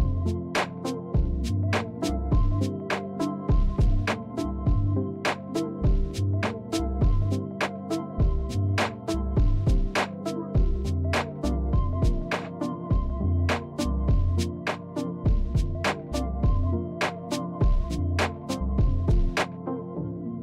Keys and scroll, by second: 13.8 Tab, 14.8 Tab, 15.8 a, 16.6 e, 18.6 Tab, 19.9 Tab.